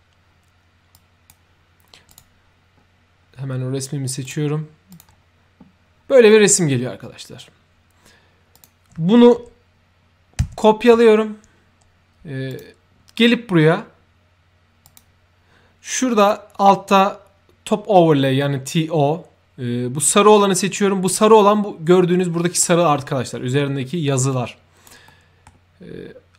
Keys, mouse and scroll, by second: 0.9 ctrl+click, 2.0 ctrl+click, 4.2 ctrl+click, 4.8 ctrl+click, 8.5 ctrl+click, 10.5 ctrl+c, 12.4 click, 14.8 click, 16.1 click, 22.1 middle click, 24.2-24.8 right drag, 25.0 middle click.